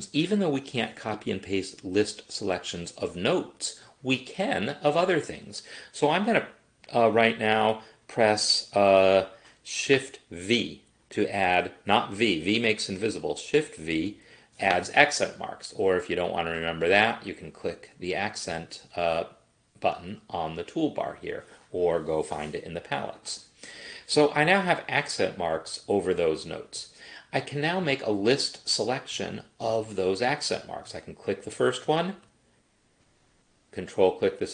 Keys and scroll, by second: 14.0 shift+v.